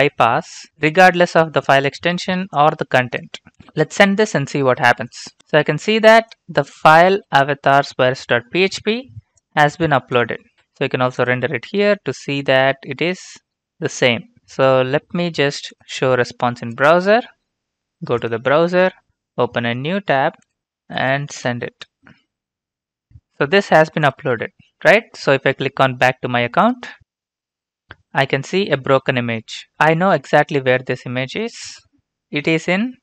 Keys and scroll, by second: 5.4 ctrl+space, 22.0 ctrl+v, 22.0 Return.